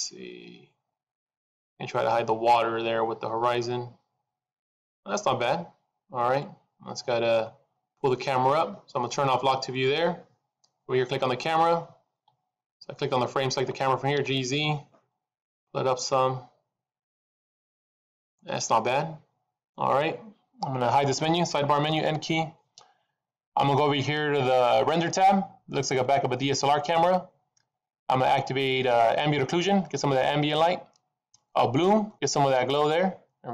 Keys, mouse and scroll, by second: 6.2 click, 9.7 click, 11.2 click, 14.0 g, 22.0 n, 25.7 click, 30.1 click, 32.3 click.